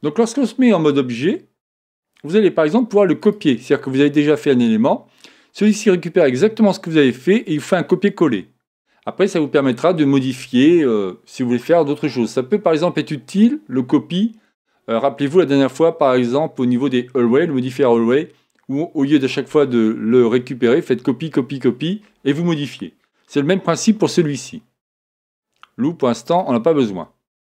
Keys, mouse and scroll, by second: 3.2-5.1 drag, 26.3-27.5 drag.